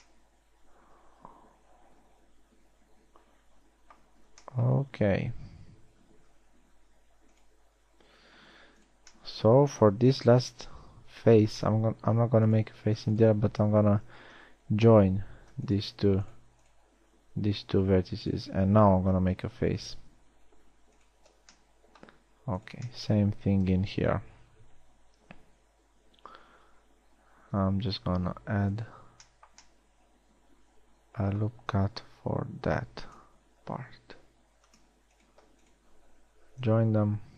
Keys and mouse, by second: 7.2 g, 8.9 g, 11.3 ctrl+z, 14.9 j, 19.7 f, 20.8 g, 25.4 ctrl+r, 32.3 ctrl+r.